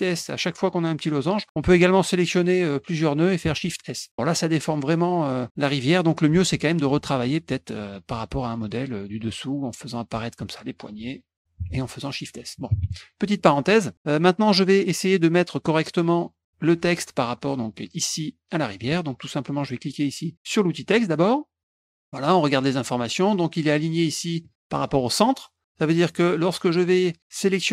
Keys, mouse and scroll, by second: 1.0 middle click, 1.9-3.0 drag, 3.5 shift+s, 6.3 ctrl+z, 8.6 shift+click, 9.4 shift+click, 11.3 click, 11.7 s, 11.9 click, 13.4 middle click, 14.4 click, 20.8 click, 21.9 click, 25.7 click, 26.2 middle click.